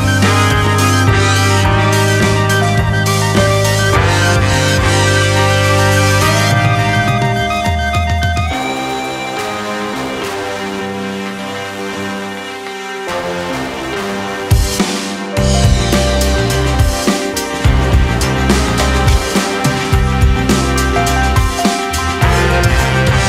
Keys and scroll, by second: 7.2 shift+space, 9.7 space.